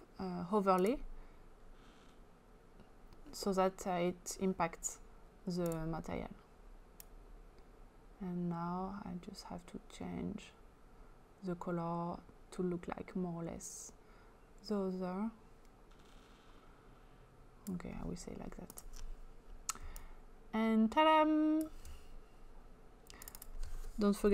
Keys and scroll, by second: 24.0-24.3 typing.